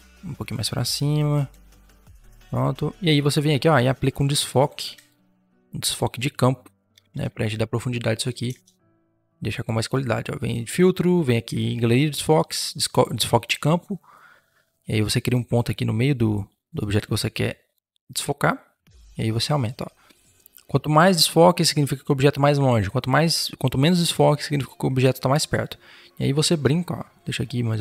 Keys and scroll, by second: 2.0 Return, 2.2 v, 4.5 v, 6.9 ctrl+t, 8.3 Return.